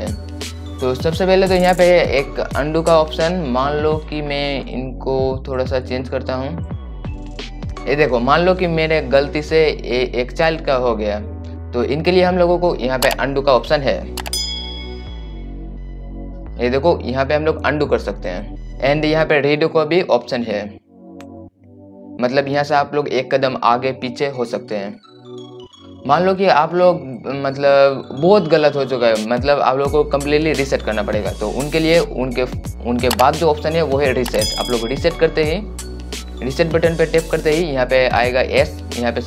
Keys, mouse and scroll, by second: 3.5 click, 6.9-7.9 drag, 8.7 scroll up 1, 9.3 scroll down 1, 10.7 scroll up 1, 21.1 click, 35.5-39.2 drag.